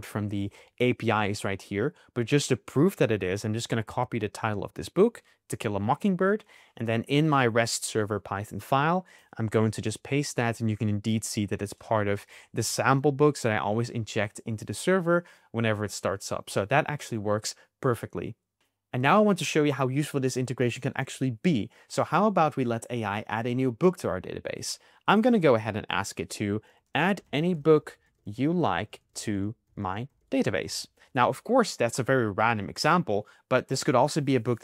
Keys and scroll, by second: 3.8 super+c, 9.7 super+v.